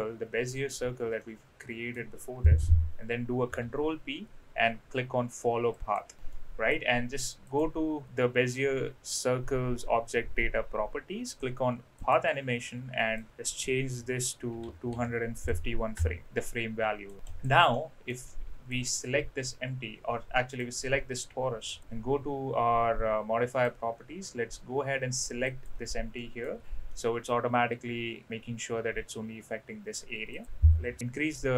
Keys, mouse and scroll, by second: 1.2-2.0 middle drag, 3.4 ctrl+p, 6.2-6.7 middle drag, 7.4 click, 12.0 click, 13.2-16.2 drag, 16.4-17.0 middle drag, 17.3 click, 17.7-18.1 middle drag, 18.8 click, 20.5 click, 21.7 click, 23.5-25.6 drag, 26.2 middle click, 26.9-27.3 middle drag, 30.3-31.4 drag.